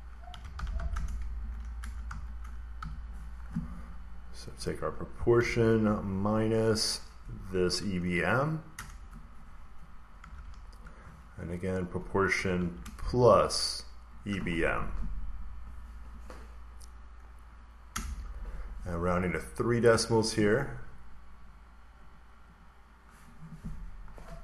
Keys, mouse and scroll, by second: 0.0-1.1 typing, 2.0 Right, 2.4-3.2 typing, 4.4 click, 5.3 -, 6.9 click, 7.5 click, 8.6 Return, 8.8 click, 9.8 Return, 10.1 =, 11.7 click, 14.1 click, 17.8 Return, 19.7 click, 22.0 click, 22.5 click, 24.0 click.